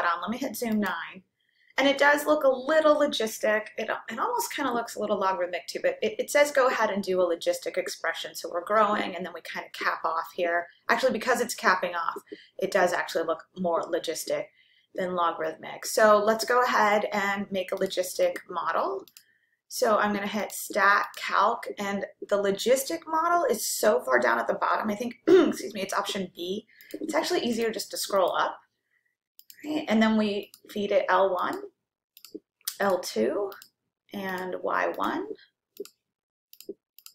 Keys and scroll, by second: 11.7 9, 21.1 Right, 26.9 Up, 27.8 Up, 28.4 Up, 29.5 Return, 31.8 1, 32.4 ,, 33.8 2, 34.6 ,, 35.8 Right, 36.6 Return, 37.0 Return.